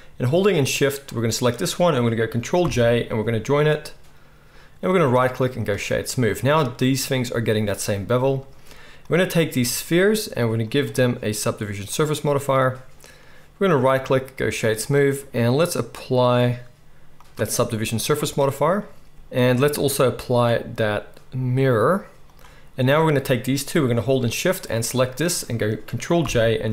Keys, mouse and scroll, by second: 0.9-4.8 shift+middle drag, 2.6 ctrl+j, 4.8-6.2 right drag, 6.2-19.1 middle drag, 10.6-19.1 drag, 10.6-26.7 right drag, 20.0-24.6 drag, 20.0-24.6 middle drag, 26.2 ctrl+j.